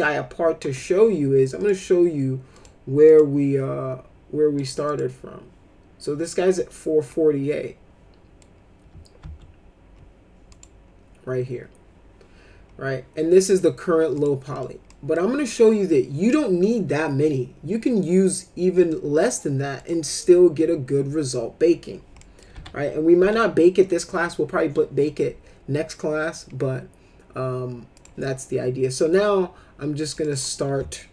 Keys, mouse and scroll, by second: 1.5 click, 2.5 click, 3.0 click, 4.5 click, 4.8 click, 7.1-8.4 middle drag, 9.2 ctrl+z, 10.5 click, 14.1 click, 14.5 middle click, 14.9 middle click, 19.8 click, 22.2 middle click, 22.5 F4, 23.2 F4, 27.9 click, 30.1 click, 30.3 click.